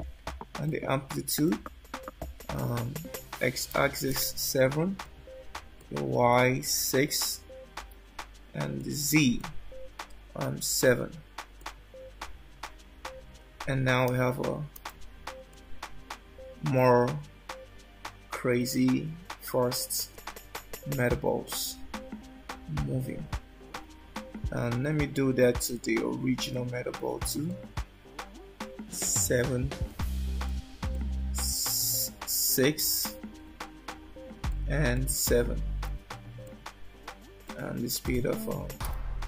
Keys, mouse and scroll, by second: 0.0 click, 5.9 click, 9.6 click, 14.2 space, 14.9 space, 15.5 middle click, 20.6-21.1 scroll down 3, 21.7 alt+middle click, 25.8 shift+middle click, 27.7 click, 31.0 click, 35.1 click, 37.6 click.